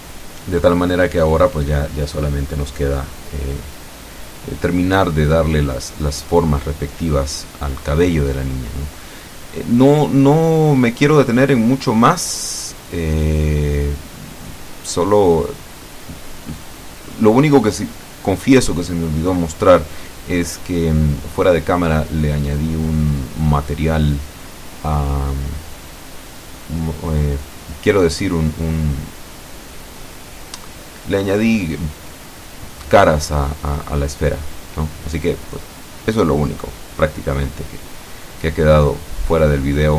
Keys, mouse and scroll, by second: 0.2-2.3 middle drag, 2.3-2.8 scroll up 4, 2.8 shift+middle click, 3.8 click, 5.3 ctrl+z, 5.9 click, 6.9 click, 7.8 click, 8.8 click, 11.2 click, 12.1 click, 13.0 click, 13.8 click, 14.8 click, 15.6 click, 16.6 ctrl+z, 17.8 ctrl+middle click, 18.9 click, 19.9 Tab, 20.8 Escape, 23.0 click, 24.0 click, 25.7 click, 28.8 click, 30.5 Up, 31.6 End, 32.0 BackSpace, 34.9 KP_7, 36.5-38.4 drag, 38.5 Tab, 39.2 Tab.